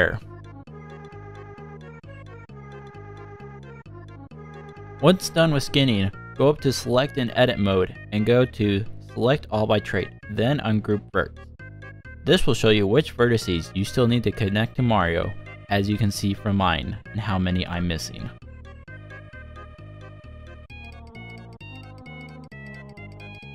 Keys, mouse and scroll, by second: 0.0 shift+middle click, 0.4 z, 0.6-0.9 scroll down 2, 1.1 shift+middle click, 13.9 scroll down 1, 14.2 shift+middle click, 15.3 middle click, 16.1-16.5 scroll up 5, 16.5 shift+middle click, 17.5 scroll up 1, 17.9 click, 18.4 l, 19.2 shift+click, 19.8 click, 19.9-20.8 scroll down 5, 20.1 shift+middle click, 20.9 shift+middle click, 21.3 scroll up 1, 21.4 scroll down 1, 22.0 click, 22.5 l.